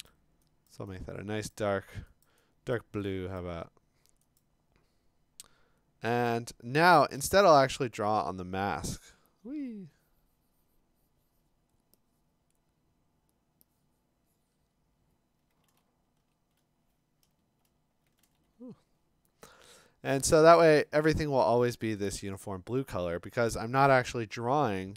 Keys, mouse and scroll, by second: 0.1 click, 0.7 click, 1.5 click, 2.3 click, 2.8 click, 3.4 click, 4.4 click, 6.3 click, 7.1 b, 12.7 right click, 15.7 ctrl+z, 16.2 ctrl+z, 17.3 alt+BackSpace, 18.2-20.8 ctrl+z, 20.1-20.6 scroll, 20.8-21.8 click, 21.1-21.7 scroll.